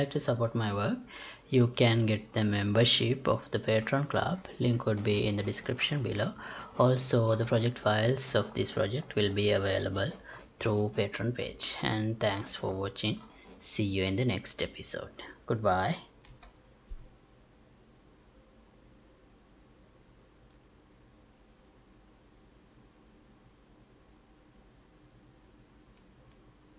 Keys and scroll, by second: 16.4 F9.